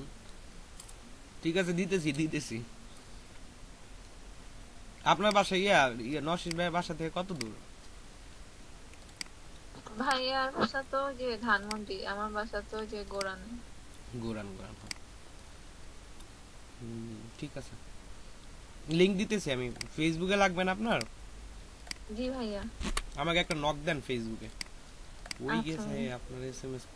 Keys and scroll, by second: 22.8 ctrl+c.